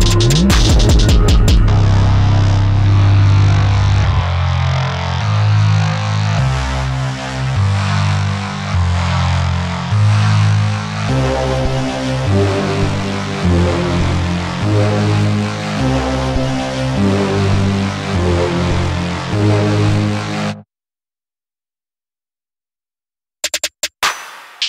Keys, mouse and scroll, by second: 6.4 scroll up 1, 6.8 a, 7.8 middle click, 9.4 click, 9.6-11.1 typing, 12.9 click, 13.4-15.5 scroll down 1, 15.6-16.0 scroll up 1, 16.0-17.4 scroll down 1, 17.4 click, 22.6 middle click, 23.7 scroll up 1.